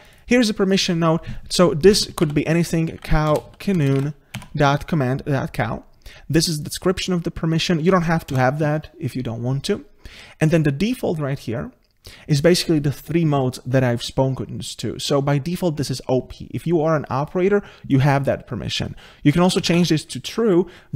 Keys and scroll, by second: 4.4 Tab.